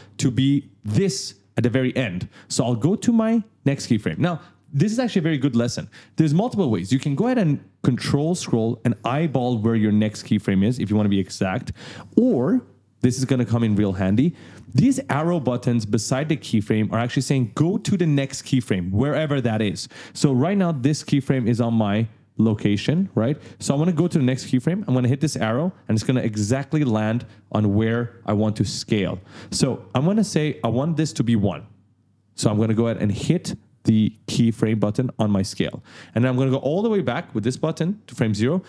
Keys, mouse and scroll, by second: 8.0-8.3 ctrl+scroll up 2, 9.0 click, 13.8-14.2 scroll up 1, 25.2 click, 34.7 click, 37.5 click.